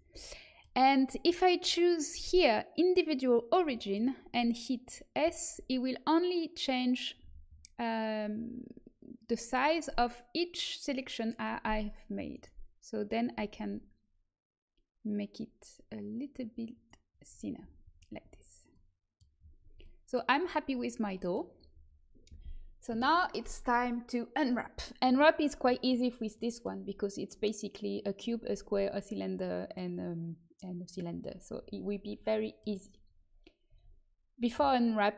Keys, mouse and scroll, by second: 0.1 click, 1.5 click, 3.7-5.1 middle drag, 5.1 s, 13.3 s, 17.5 a, 18.1 Tab, 25.0-26.9 middle drag, 33.6 Tab.